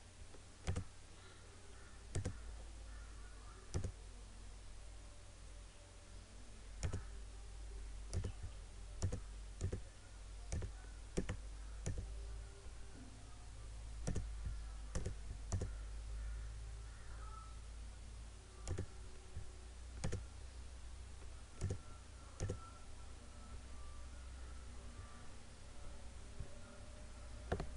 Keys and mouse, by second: 6.8 click, 18.8 click.